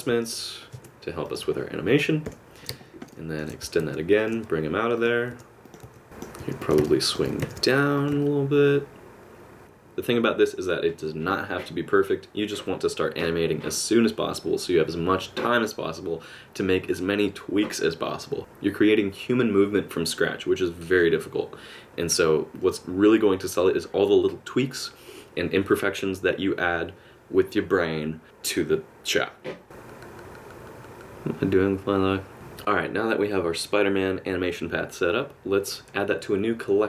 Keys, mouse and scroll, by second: 0.1 g, 2.3 KP_7, 3.1 shift+middle click, 3.8-6.0 typing, 6.0 middle click, 6.6 click, 6.9 middle click, 7.3 g, 8.2 middle click, 22.6 middle click, 28.2 middle click.